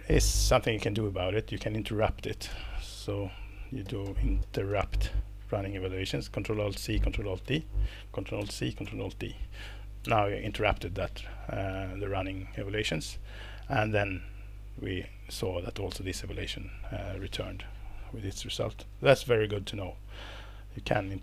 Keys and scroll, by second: 2.5 shift+super+p, 3.6-5.3 typing, 7.2-7.9 typing, 8.4 ctrl+alt+c, 8.8 ctrl+alt+d, 19.5 Escape.